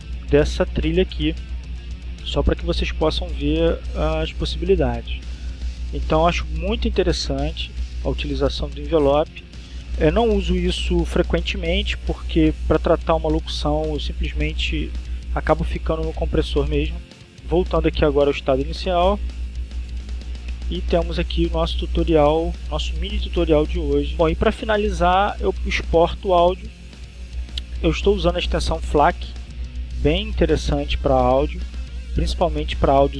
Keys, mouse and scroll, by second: 0.8-3.5 drag, 4.0-7.2 drag, 17.3 ctrl+z, 24.9 click, 26.9 click, 32.1 click.